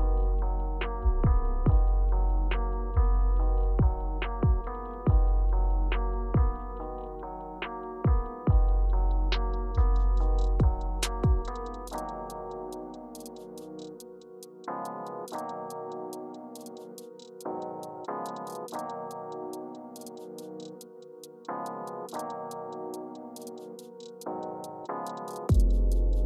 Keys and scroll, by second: 0.2 super+y, 1.2 super+z, 1.8 Return, 3.3 Return, 9.8 Return, 10.8 Left, 11.2 Down, 14.9 typing, 15.7 Return, 16.6 Up, 17.8 Down, 19.1 Up, 19.4 Up, 20.0 Left, 21.4 Up, 24.9 Right, 25.3 Down.